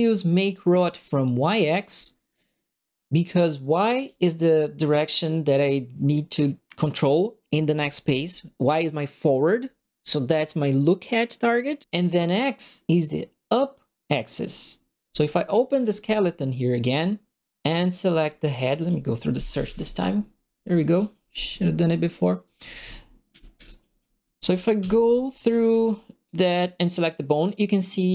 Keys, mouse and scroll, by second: 0.7 middle click, 1.8 right click, 4.0 click, 15.7 click, 18.7 click, 19.2-20.2 typing, 20.8 click, 22.1-25.6 typing, 22.3-23.6 right drag, 25.2-26.2 right drag.